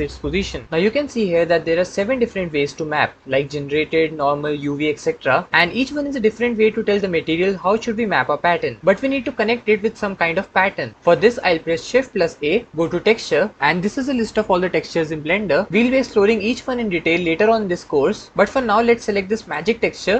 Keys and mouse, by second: 11.8 shift+a.